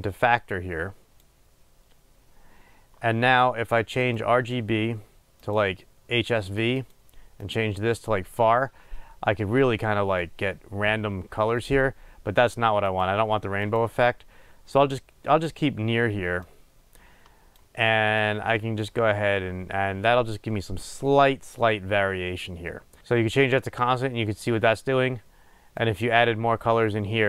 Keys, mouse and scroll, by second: 5.7-27.2 drag.